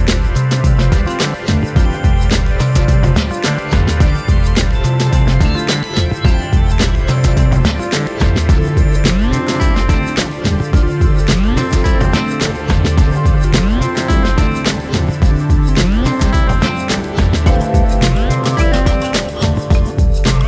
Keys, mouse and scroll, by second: 0.0 click, 0.1-0.5 scroll down 4, 0.5-1.2 shift+middle drag, 1.2 scroll up 2, 1.3-2.0 shift+middle drag, 2.0 click, 2.3 Tab, 2.5-2.9 scroll up 1, 2.9-5.0 shift+middle drag, 5.1 click, 6.6-9.6 drag, 12.1 click, 12.8-13.8 middle drag, 13.8 click, 14.6 click, 14.7 scroll down 1, 14.8 middle click, 15.5 Tab, 15.7 click, 15.9-16.6 scroll up 1, 16.6-17.1 middle drag, 17.1 scroll up 2, 17.2-17.6 shift+middle drag, 17.6 click, 17.9 Tab, 18.7 ctrl+r, 19.8 click, 20.3 3.